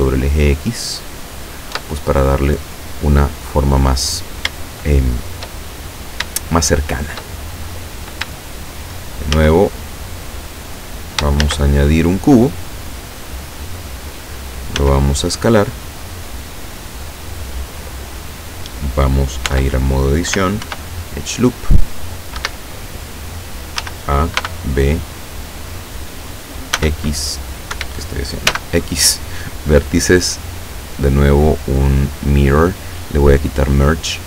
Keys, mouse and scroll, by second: 0.4 click, 1.0-1.5 scroll down 2, 1.8 Tab, 3.2 scroll up 2, 3.6-4.0 scroll down 2, 4.6 shift+middle click, 5.9 shift+scroll up 3, 6.4-7.4 shift+middle drag, 9.4 shift+a, 11.5 shift+a, 13.2 click, 14.8 s, 17.4 click, 19.6 Tab, 20.7 ctrl+r, 21.5 click, 22.4 Escape, 23.9 a, 24.5 b, 25.2-26.3 drag, 26.8 s, 27.8 Escape, 28.6 x, 29.3 click, 30.6 click, 32.2 click, 33.4 click.